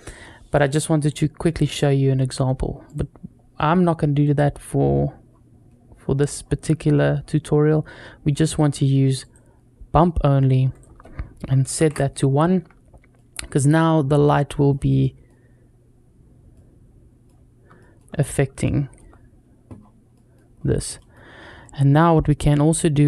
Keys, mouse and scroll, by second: 0.6 middle click, 0.9-2.1 scroll down 3, 2.7-3.5 drag, 4.0 click, 4.7-5.7 scroll down 2, 6.2-7.0 scroll down 2, 7.0-8.3 scroll down 1, 8.3-9.4 drag, 10.5-12.2 drag, 13.0-13.6 middle drag, 14.1 middle click, 14.8-15.1 middle drag, 16.4-17.1 middle drag, 17.1-17.5 scroll down 2, 17.6 shift+middle drag, 18.0-18.4 scroll up 2, 18.4-18.8 shift+middle drag, 19.6-20.3 scroll down 2, 20.0 middle click, 20.4-20.8 scroll up 2, 20.8 middle click, 21.4 middle click, 21.4 scroll up 1, 22.0 scroll up 1.